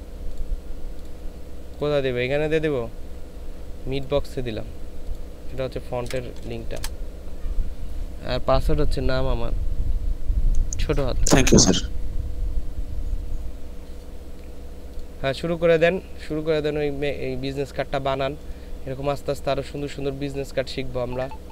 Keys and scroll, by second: 6.1 ctrl+v, 6.7 ctrl+Return.